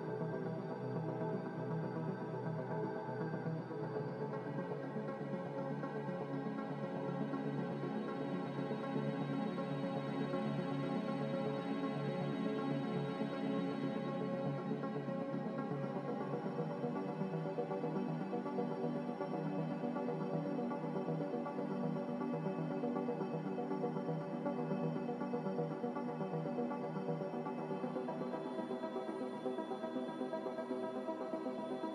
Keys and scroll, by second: 2.2-3.4 typing, 24.6 z.